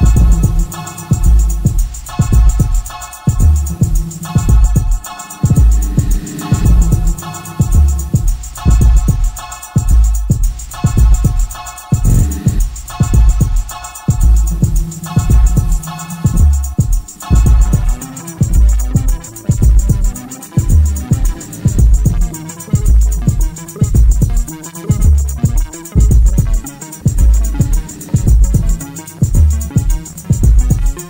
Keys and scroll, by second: 5.4 5, 13.2 4, 14.4 Delete, 15.7 ctrl+d, 15.9 Escape, 22.8 ctrl+z, 26.7 3, 27.3 Delete, 30.2 ].